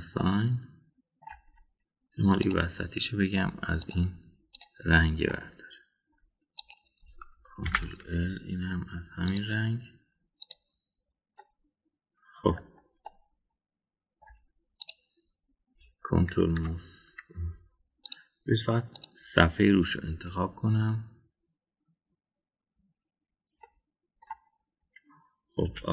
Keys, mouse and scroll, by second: 0.6 click, 1.2-2.2 middle drag, 3.4 click, 4.8 click, 5.5 click, 6.2 middle click, 7.6 click, 8.7 ctrl+l, 10.3 click, 11.4 click, 12.3-13.5 middle drag, 14.1-15.2 middle drag, 15.8 click, 17.6 ctrl+KP_Add, 19.9 click, 24.6 middle click.